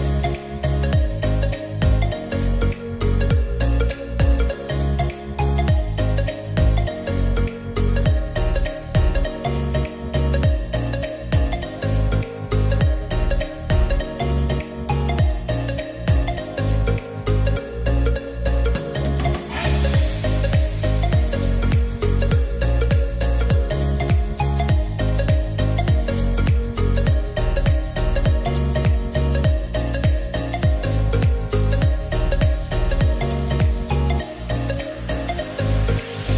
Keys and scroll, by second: 14.0 0, 14.2 Tab, 14.3 0, 14.5 Return, 27.0-27.9 typing, 31.7 ctrl+a.